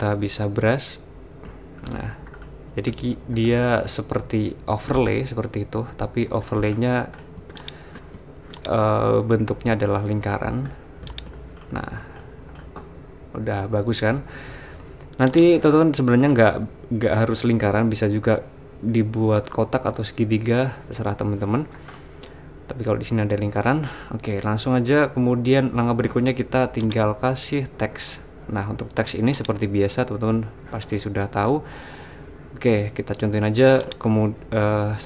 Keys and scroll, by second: 4.7 super+z, 5.8-8.2 typing.